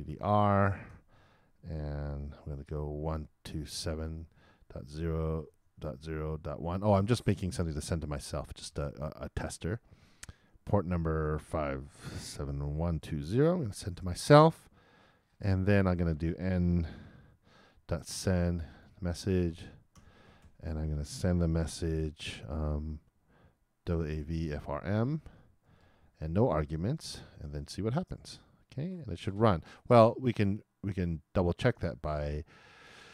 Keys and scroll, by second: 0.0-1.4 typing, 2.5 shift+', 3.1 shift+i, 7.8-9.0 typing, 13.6 shift+0, 14.0 shift+;, 14.7 shift+super+;, 15.0 super+Return, 19.0-21.9 typing, 24.8-25.6 typing, 26.7 shift+BackSpace, 26.8 shift+0, 27.3 shift+;, 27.8 super+Return.